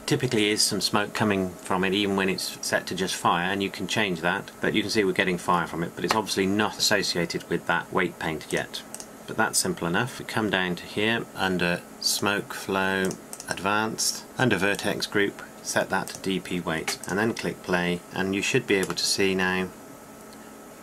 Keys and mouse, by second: 11.3-11.8 drag, 12.0-18.0 drag, 18.0 n.